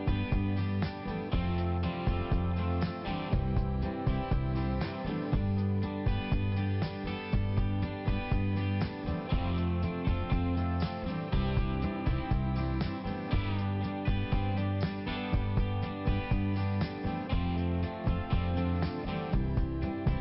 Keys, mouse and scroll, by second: 0.0 click, 0.6 click, 2.2 click, 2.3 click, 2.6 click, 3.2 click, 3.9 click, 5.4 click, 7.3 click, 7.9 double click, 8.3 double click, 8.7 double click, 8.8 double click, 9.1 double click, 9.5 double click, 9.6 double click, 9.9 double click, 10.3 double click, 10.4 double click, 10.7 double click, 11.3 click, 11.4 click, 12.1 click, 12.6 click, 12.7 click, 13.1 click, 13.5 click, 13.6 double click, 14.3 double click, 14.7 double click, 14.7 double click, 15.4 double click, 18.2 click, 18.7 click, 18.8 double click, 19.1 double click.